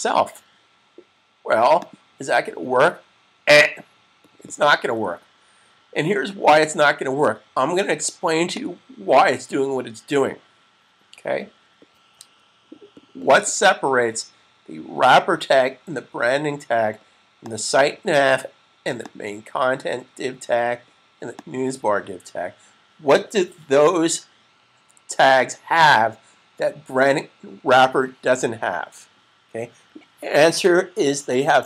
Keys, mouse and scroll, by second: 1.7 click, 5.7 super+s, 8.4 click, 17.6 click.